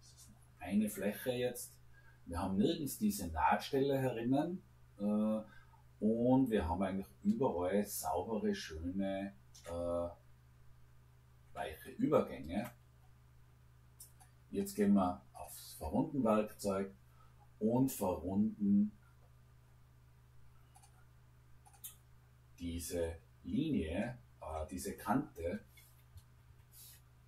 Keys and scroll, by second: 26.2 Escape.